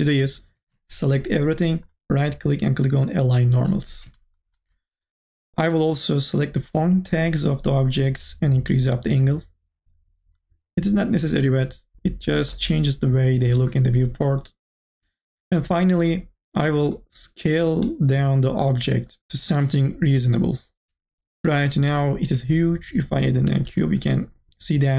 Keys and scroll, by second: 0.9 ctrl+a.